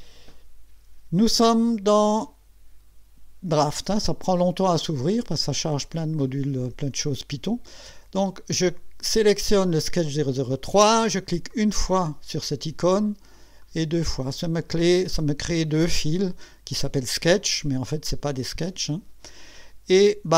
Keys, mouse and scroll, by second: 11.5 click, 13.6 click.